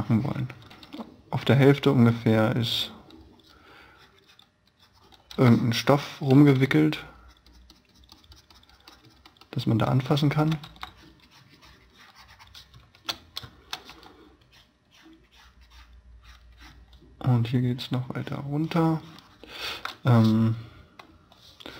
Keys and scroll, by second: 0.9 b, 5.2 e, 6.3 b, 10.0 space, 10.7 e, 12.7 space, 14.0 b.